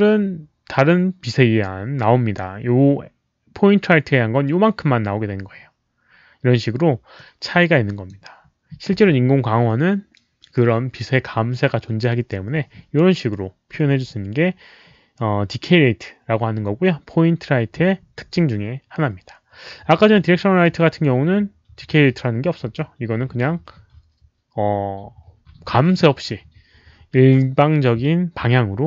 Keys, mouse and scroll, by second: 7.1 click, 13.6 click.